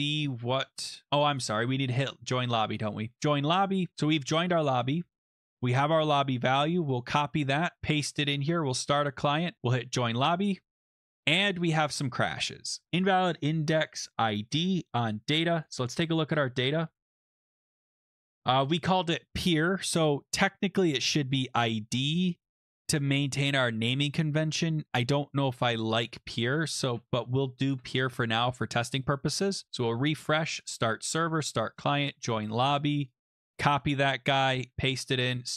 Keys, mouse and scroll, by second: 0.2-0.6 scroll up 1, 0.8 alt+Tab, 0.8 scroll, 0.9 click, 1.0-1.4 scroll up 1, 3.1 click, 5.3 click, 5.4 click, 6.3 ctrl+c, 7.0 click, 7.8 ctrl+v, 8.7 click, 9.8 click, 12.9 click, 14.0 click, 15.6 click, 16.1-16.6 scroll down 9, 16.9 scroll up 3, 17.3 click, 17.6 scroll down 3, 20.7 scroll, 21.6 click, 21.7 click, 24.1-24.6 scroll up 3, 24.6 scroll down 2, 26.4-27.6 typing, 26.8 scroll, 27.7 ctrl+s, 29.1 click, 30.1 click, 30.6 click, 31.3 click, 31.9 click, 32.5 click, 33.0 click, 33.1 click, 33.4 ctrl+c, 33.8 click, 34.6 click, 34.7 ctrl+v, 35.4 click.